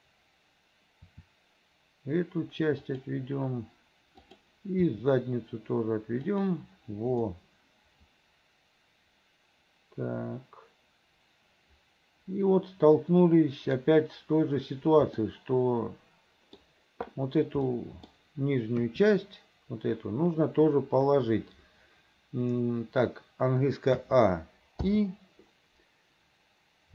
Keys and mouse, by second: 1.2 r, 4.9 r, 7.5-10.0 drag, 10.0-13.8 middle drag, 15.4-16.7 middle drag, 18.0 middle click, 18.9 KP_3, 24.1 a, 25.0 i.